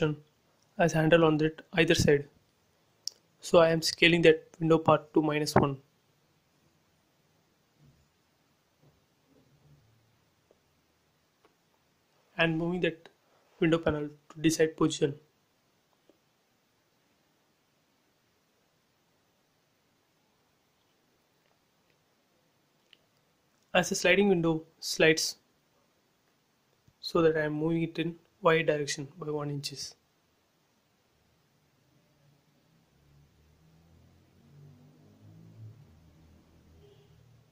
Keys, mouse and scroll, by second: 0.3 s, 1.7 shift+x, 2.6 space, 2.7 scroll down 2, 3.5 middle click, 3.6 middle click, 4.1 scroll up 1, 5.6-6.5 typing, 7.5 click, 8.7 typing, 9.4 Return, 10.1 space, 12.0 k, 12.2 scroll down 1, 12.8 scroll down 1, 13.4 middle click, 14.1 scroll up 1, 15.0 m, 15.5 click, 16.7 Right, 18.1 scroll up 1, 19.5 click, 19.6 space, 19.7 scroll down 1, 20.6 scroll down 1, 20.9 click, 21.3 scroll up 1, 22.2 middle click, 22.9 click, 23.7 click, 23.9 scroll down 1, 26.1 m, 26.6 click, 27.6 Left, 28.7 1, 29.3 shift+', 29.4 Return, 29.7 space, 29.9-30.3 scroll up 2, 31.0 click, 31.4-31.8 scroll down 2, 32.8 m, 33.2 click, 34.2 Left, 35.1 2, 35.6 shift+', 35.7 Return, 36.2 space, 36.4 scroll up 1, 37.2 middle click.